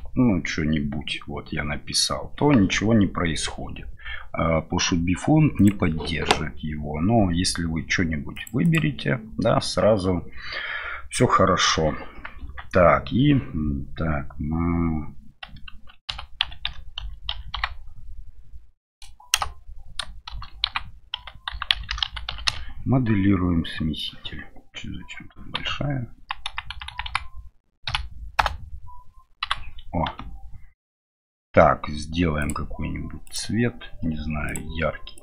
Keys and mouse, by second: 20.3 shift+c, 20.7 v, 25.6 Left, 27.9 Left, 27.9 Right, 28.4 BackSpace, 29.4 c.